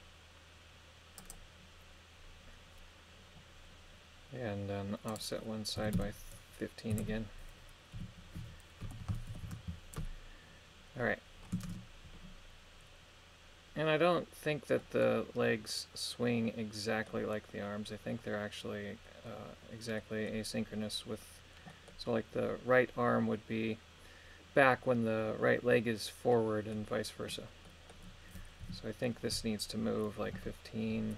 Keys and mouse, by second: 1.2 click, 5.8 a, 5.9 a, 6.9 a, 7.9 g, 8.8 KP_1, 9.3 KP_5, 9.4 Return, 11.7 shift+space, 14.8-17.1 middle drag, 20.0 middle click, 21.7 middle click, 26.4 middle click, 27.6 middle click, 28.6 g.